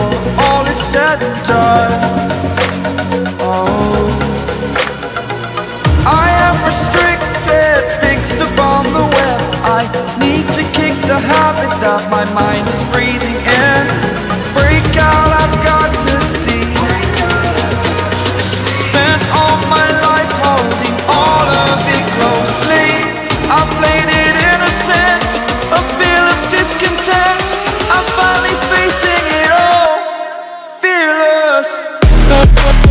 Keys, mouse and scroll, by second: 4.3 e, 5.0-5.6 alt+scroll up 2, 5.6-6.1 typing, 7.0 click, 7.7-8.3 typing, 9.2 click, 9.6-9.9 typing, 10.3 click, 12.1-13.4 typing, 12.6 click, 13.5 click, 14.8-15.3 typing, 15.4 click, 16.0 alt+scroll up 1, 16.5 click, 17.3-17.7 typing, 17.8 click, 20.8-21.6 typing, 20.9 click, 21.7 click, 23.7-24.2 alt+scroll down 1, 24.5 click, 25.1 alt+scroll down 1, 26.6-27.0 alt+scroll up 1, 27.0 click, 27.7-28.5 ctrl+alt+scroll down 1, 28.5 right click, 29.5 click, 30.1 ctrl+alt+scroll up 1, 31.9 click.